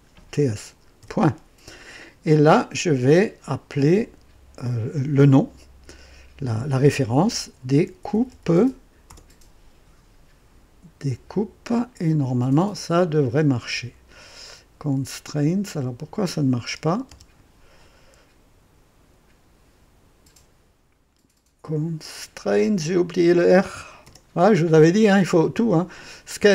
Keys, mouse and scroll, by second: 1.0 typing, 7.0-9.5 typing, 15.7 click, 17.0 Return, 17.1 Return, 22.7 click, 24.0 r.